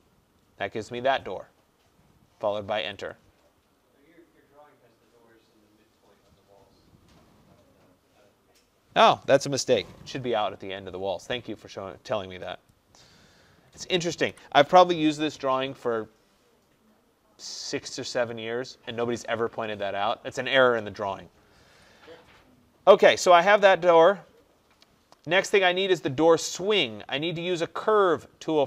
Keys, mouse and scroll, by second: 2.9 Return, 12.8 click, 14.4 Delete, 23.6 click.